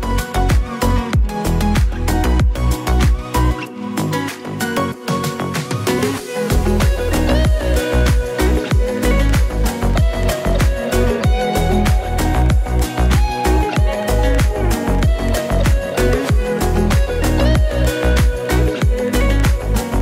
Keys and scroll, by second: 1.8 ctrl+z, 5.2 ctrl+z, 5.6 ctrl+z, 6.1 ctrl+z, 7.7 ctrl+z, 9.7 Tab, 10.1 x, 10.4 Tab, 13.2 ctrl+z, 13.2 [, 13.3 ctrl+z, 13.3 [, 13.5 [, 14.9 ctrl+z, 16.1 ctrl+z, 18.5 ctrl+z, 19.9 ctrl+z.